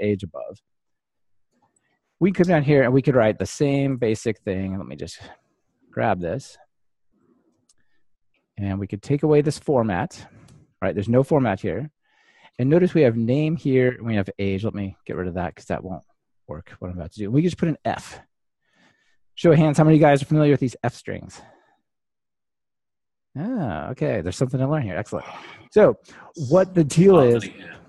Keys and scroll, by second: 5.9 super+c, 7.3 super+v.